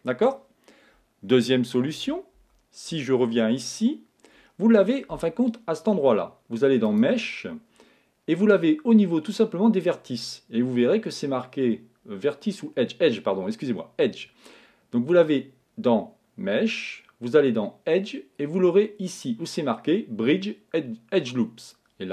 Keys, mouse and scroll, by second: 2.4 super+z, 6.8-8.6 drag.